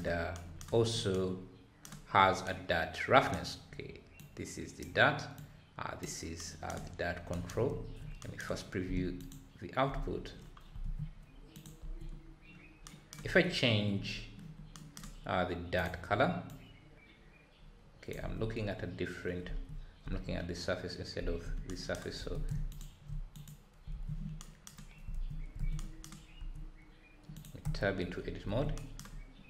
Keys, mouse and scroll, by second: 11.3 ctrl+s, 13.4-13.9 scroll down 3, 14.1-14.6 scroll up 2, 16.5 click, 19.6 Tab, 20.0 Tab, 22.7 ctrl+shift+click.